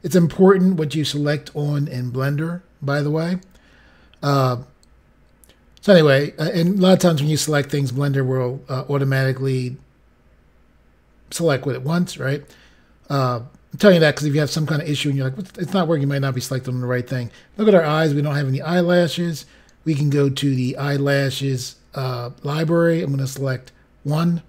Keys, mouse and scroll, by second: 20.5 click, 24.0 click.